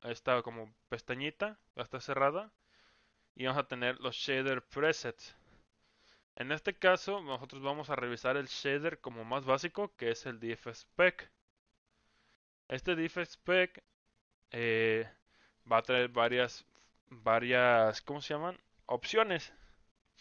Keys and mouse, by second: 1.4 click, 2.4 click, 6.4 click.